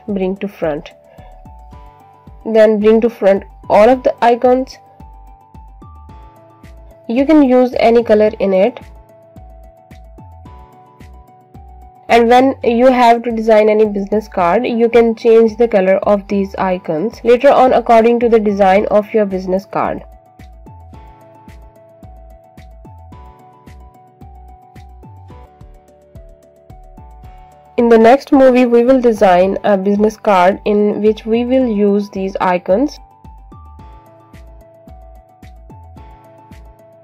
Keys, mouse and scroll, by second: 2.9 right click, 4.1 click, 5.7 shift+click, 6.5 click, 8.1 click, 11.5 click, 17.8 click, 20.8 click, 21.2 click, 26.2 alt+shift+click, 27.1 click, 32.4 click, 34.6 alt+click, 36.6-37.0 scroll down 1.